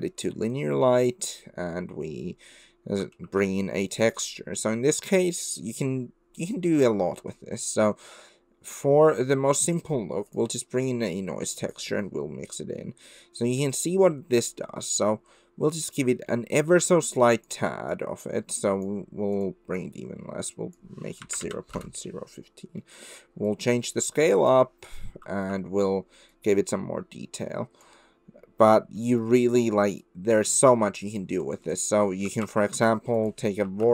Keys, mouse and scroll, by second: 3.2 shift+a, 10.9-11.8 drag, 14.1-15.8 drag, 16.4 middle click, 17.4 click, 17.9 click, 18.6 click, 19.5-22.4 drag, 22.9 middle click, 23.5-24.5 drag, 25.2 shift+middle click, 26.3-27.8 drag, 29.1 middle click, 29.2 click, 30.1-31.2 drag, 31.5 middle click, 32.4 shift+a.